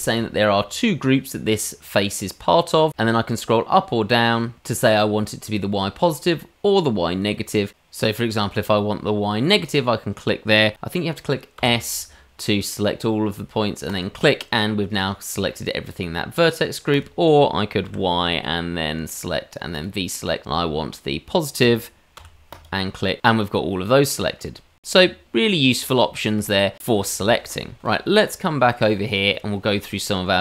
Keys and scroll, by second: 17.8 y, 25.0 Tab, 27.9 shift+Delete.